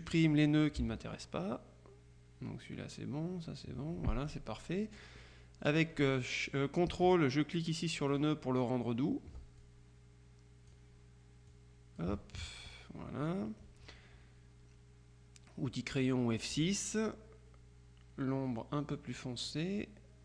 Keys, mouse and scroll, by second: 0.3 click, 0.9 Delete, 8.2 ctrl+click, 9.7-11.3 drag, 11.6-12.6 drag, 16.0 click, 19.6-20.2 drag.